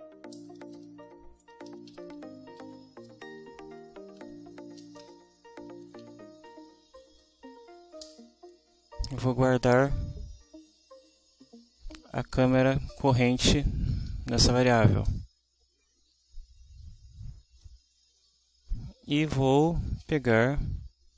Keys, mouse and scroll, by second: 0.0-6.5 typing, 0.3 shift+Return, 7.0 Down, 8.0 Return, 15.1 Return, 19.4-21.1 typing.